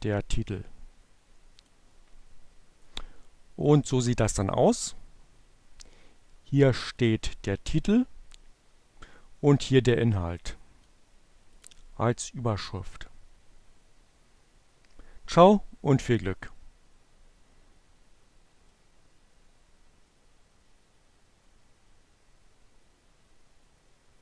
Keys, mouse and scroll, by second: 0.2-1.3 drag, 3.0 click, 6.0 click, 6.8 click, 8.2-10.6 drag, 10.7 click, 24.0 click.